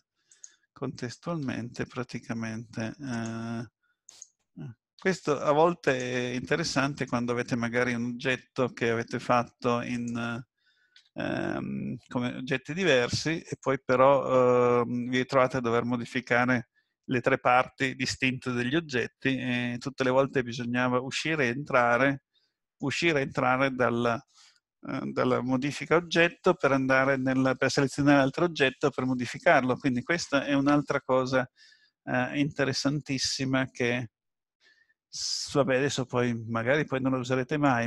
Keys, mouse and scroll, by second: 0.3 click, 1.4 g, 4.1 click, 5.0 g, 6.4 middle click, 7.4-8.4 scroll down 3, 8.8-9.4 scroll up 3, 10.0 click, 10.9 g, 14.0 middle click, 35.6 middle click.